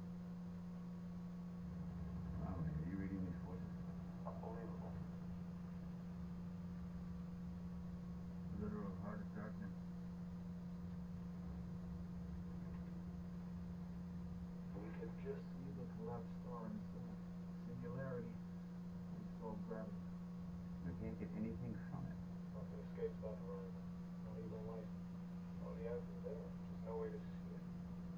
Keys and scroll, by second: 12.0 Up, 12.5 Up.